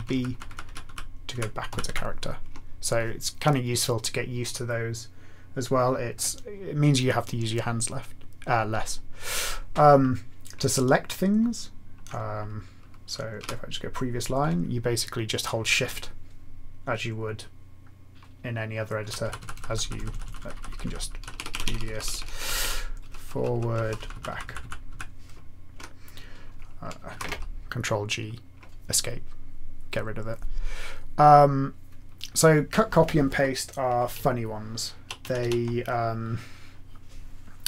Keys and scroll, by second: 0.1 ctrl+b, 0.3 ctrl+b, 0.4 ctrl+b, 0.6 ctrl+b, 1.3 ctrl+b, 1.8 ctrl+b, 13.4 ctrl+p, 19.0 ctrl+n, 19.2 ctrl+n, 19.4 ctrl+n, 19.5 ctrl+n, 19.9 ctrl+n, 20.3 ctrl+n, 20.5 ctrl+n, 21.2 ctrl+p, 21.3 ctrl+p, 21.5 ctrl+p, 21.6 ctrl+p, 21.7 ctrl+p, 22.0 ctrl+p, 22.1 ctrl+p, 22.4 ctrl+p, 22.6 ctrl+p, 23.0 ctrl+f, 23.1 ctrl+f, 23.3 ctrl+f, 23.5 ctrl+f, 23.5-24.9 typing, 23.6 ctrl+f, 26.8-27.6 typing, 34.2 Down, 34.6 Down, 34.6-35.0 Down, 35.3 Down.